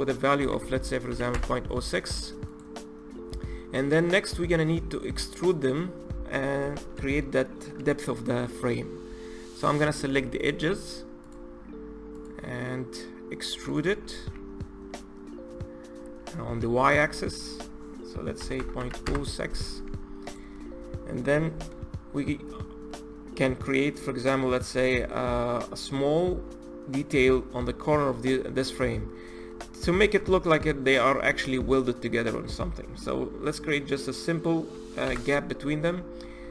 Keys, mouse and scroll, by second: 2.4 click, 3.3-6.3 middle drag, 6.5 Tab, 9.0 Tab, 9.7 3, 10.2 click, 11.1 shift+click, 12.1 shift+click, 13.6 shift+click, 14.1 e, 19.8 Tab, 20.2 click, 20.5-22.3 middle drag, 22.3-22.8 scroll up 1, 22.8-23.8 middle drag, 23.8 scroll up 2, 24.3-27.8 middle drag, 28.0-28.4 middle drag, 28.4-28.8 scroll down 1, 28.8-29.4 scroll up 3, 29.4-30.6 middle drag, 30.6-31.8 scroll up 1, 31.8-34.9 middle drag, 34.9 KP_1, 35.7-36.5 scroll down 7.